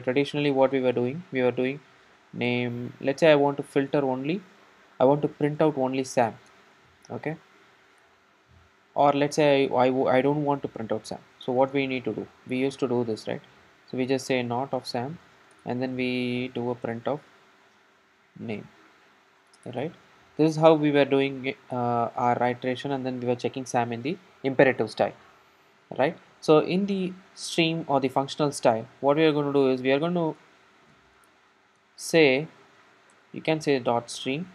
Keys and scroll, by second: 3.5 Return, 16.9 Tab, 19.6 Return, 33.2 Return.